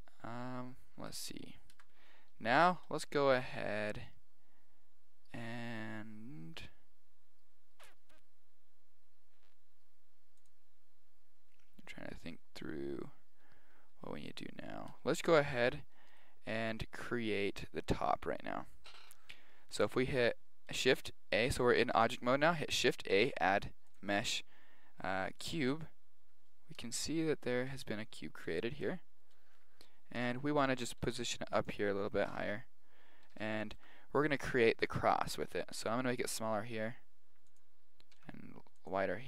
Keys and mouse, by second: 1.7 Tab, 2.3-5.4 middle drag, 10.4 click, 16.1-17.8 right drag, 16.7-19.3 middle drag, 19.0 KP_1, 23.0 shift+a, 25.9-31.0 middle drag, 26.8 KP_1, 31.0 g, 32.3 KP_1, 32.3 KP_4, 33.7 Tab, 35.9 s, 38.1 s.